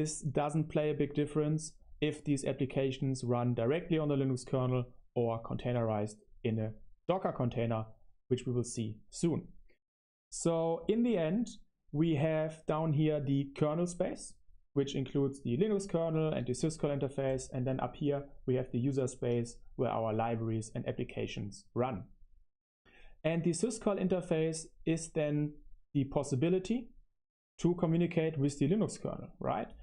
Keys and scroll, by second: 0.7 typing.